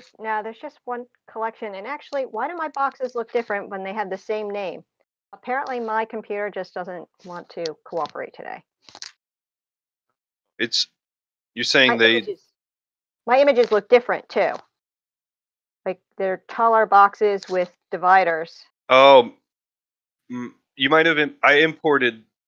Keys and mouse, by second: 4.1 click, 4.8 click, 12.8 drag, 13.5-14.0 drag, 14.4 click, 17.5-18.1 middle drag, 20.0 click.